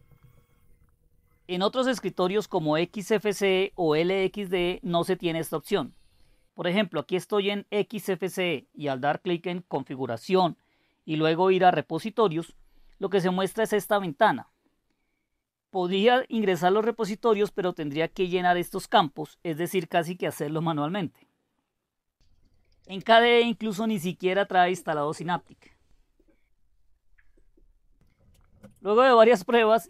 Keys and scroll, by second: 12.5 Down.